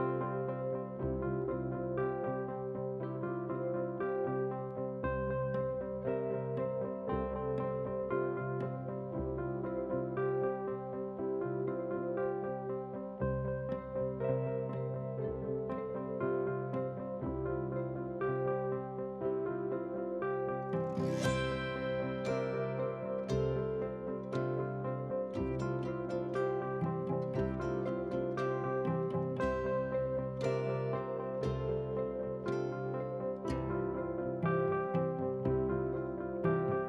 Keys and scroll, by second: 25.3 ctrl+c, 26.5 F8, 27.2 ctrl+v.